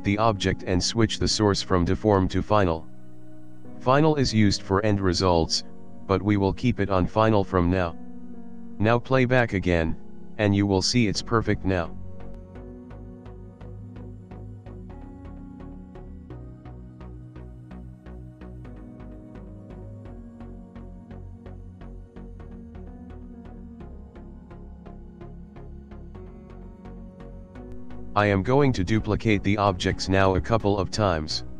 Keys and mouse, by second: 0.4 click, 1.4 click, 1.7 click, 5.9 click, 6.9 click, 9.1 click, 9.6 click, 14.6 click, 17.1 click, 18.5 middle click, 20.4 click, 21.2 shift+middle click, 22.0 click, 22.5 middle click, 24.6 middle click, 25.8 click, 26.6 shift+click, 27.4 click, 27.9 middle click, 29.5 alt+d, 31.2 middle click.